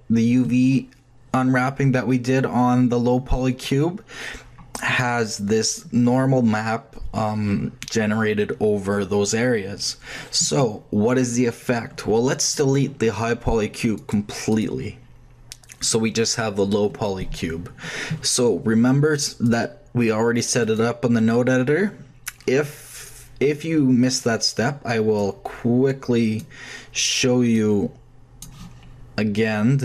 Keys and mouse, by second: 12.4 click, 13.9 middle click, 14.3 click, 15.8-17.5 drag, 19.4-19.8 drag, 21.3-24.0 middle drag, 24.2-29.4 drag.